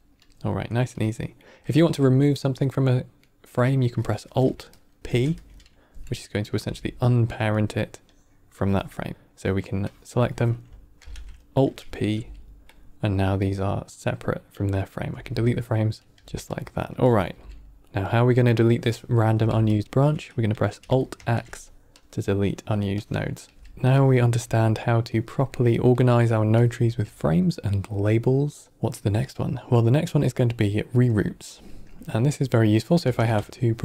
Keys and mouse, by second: 0.1 click, 0.9 click, 1.9 click, 3.2 middle drag, 4.9 alt+p, 6.4 g, 8.0-8.5 drag, 8.7 drag, 9.8 drag, 10.9 alt+p, 12.0 g, 13.3 click, 15.0 x, 15.9 click, 16.0 x, 16.2 g, 17.0 drag, 17.2 g, 18.7-19.2 drag, 19.2 g, 21.0 alt+x, 22.9-23.2 drag, 23.3 g, 23.7 g, 23.9-24.2 drag, 24.2 g, 25.6 middle click, 26.5 click, 26.6 g, 28.4 middle click, 30.0-30.4 middle drag, 31.4-31.8 drag, 33.0 ctrl+shift+d, 33.5 g.